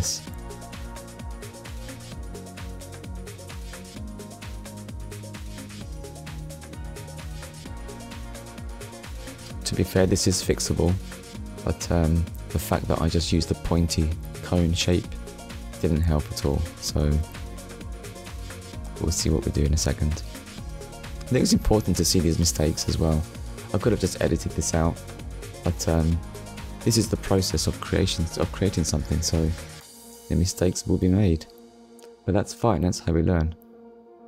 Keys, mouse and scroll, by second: 3.0 click, 3.7 Tab, 4.7 click, 6.4 click, 8.8 middle click, 12.7 middle click, 13.1 Tab, 14.1 ctrl+r, 18.1 right click, 19.0 shift+middle click, 20.6-21.0 scroll down 1, 23.5 Tab, 24.3 scroll down 1, 24.9 middle click, 28.1 middle click, 30.3 click.